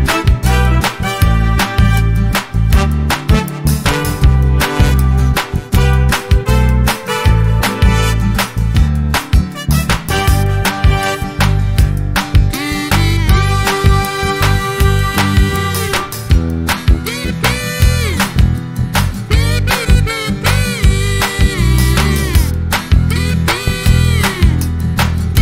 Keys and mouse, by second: 0.7 click, 1.1-3.3 drag, 4.1 click, 5.3 F12, 6.6 click, 7.9-8.9 drag, 10.5 ctrl+g, 11.5 click, 13.3 click, 15.2-17.9 ctrl+shift+drag, 18.3 space, 19.8 =, 20.3 space, 21.0 click, 21.7-23.0 drag, 23.9 space, 25.2 click.